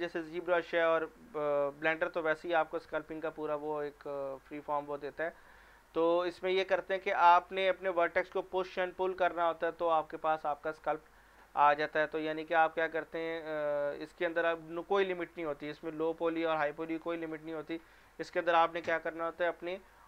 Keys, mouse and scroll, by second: 12.2 scroll down 1, 19.8 scroll down 1.